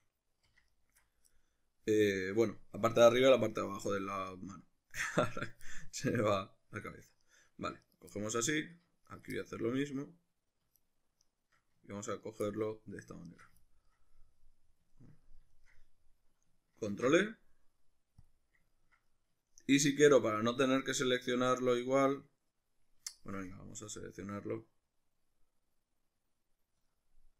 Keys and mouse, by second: 0.7 alt+shift+right click, 1.3-7.2 middle drag, 7.2 shift+right click, 7.8 shift+right click, 8.1 middle click, 9.1 shift+right click, 9.3-10.8 middle drag, 10.8 shift+right click, 11.2 shift+right click, 12.1 ctrl+right click, 12.5 middle click, 13.3 shift+right click, 13.7-19.3 ctrl+middle drag, 16.9 ctrl+e, 19.4-27.3 shift+middle drag.